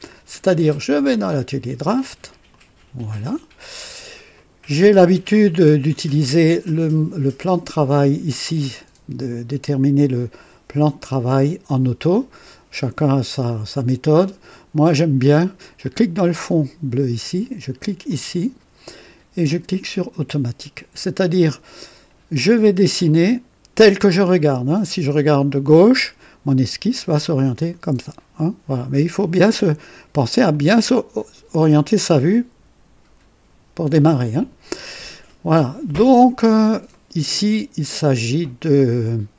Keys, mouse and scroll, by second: 0.9 click, 2.4 click, 3.4-3.7 scroll down 2, 3.8 scroll up 2, 4.3 right click, 5.3 click, 6.6 click, 15.7 click, 18.0 click, 20.0 click, 21.3-22.0 drag, 23.0 click, 23.9-25.8 right drag, 30.4 click, 36.3 scroll down 2, 36.9-39.1 right drag.